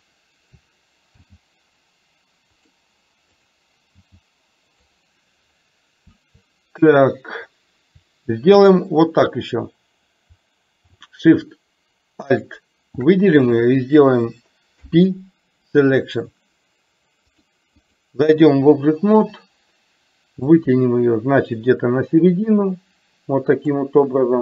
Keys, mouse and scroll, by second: 1.2 g, 3.5 click, 4.0 g, 12.5 shift+click, 14.7 p, 17.4 click, 18.0 click, 20.6-23.9 drag.